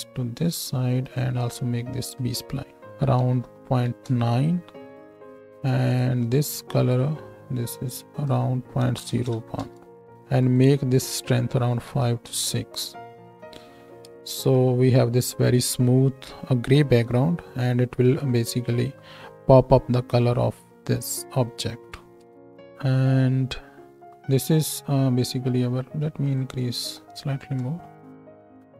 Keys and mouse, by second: 6.9-10.5 drag, 14.1 ctrl+space, 18.0 shift+click, 18.0 shift+right click, 19.3-22.3 drag, 19.3-22.3 middle drag, 19.3-22.3 right drag, 22.3 ctrl+space.